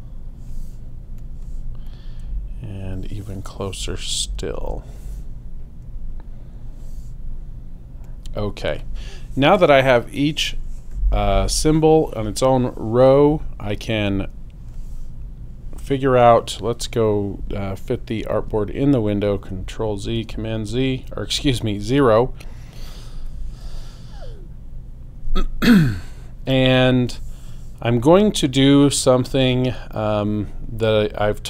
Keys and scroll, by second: 4.6 shift+super+a, 18.5 super+0, 20.2 super+space.